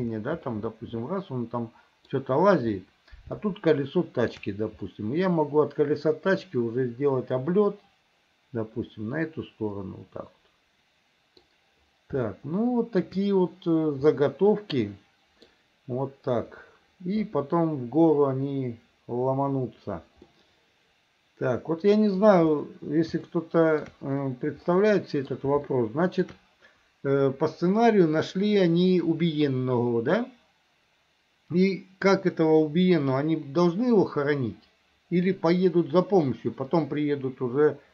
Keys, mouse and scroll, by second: 0.6-2.2 middle drag, 3.5 shift+middle click, 4.9-11.5 middle drag, 12.3 shift+middle click, 14.2-15.5 middle drag, 20.3-22.2 middle drag, 23.4 shift+middle click, 24.7 middle click, 25.7 shift+middle click.